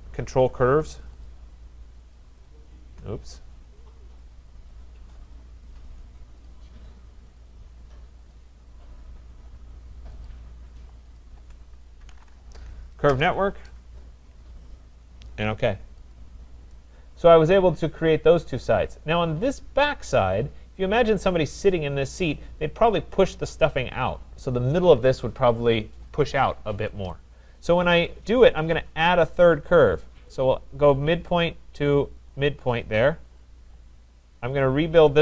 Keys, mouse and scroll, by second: 1.3 shift+click, 2.2 click, 2.5 click, 3.4 click, 4.3 middle click, 4.8 click, 5.7 click, 6.5 shift+click, 7.4 shift+click, 8.3 click, 10.3 click, 11.2 shift+click, 11.8-12.7 typing, 13.1 Return, 15.1 click, 16.1 click, 18.6 right click, 19.2-19.5 scroll, 20.0-20.3 scroll, 28.1 click, 28.6 middle click, 28.7 middle click, 28.8 middle click, 30.3 click, 32.3 click, 33.2 Return, 34.6 click.